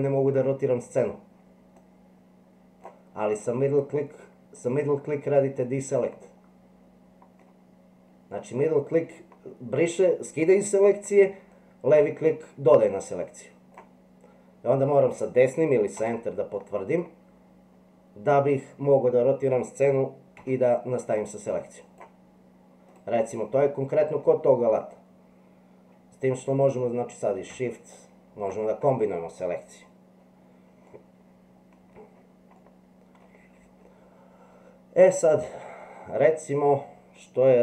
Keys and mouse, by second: 16.5-18.5 middle drag, 20.4 c, 23.3 middle click, 28.0 shift+click, 30.9-31.9 middle drag, 32.6 middle click.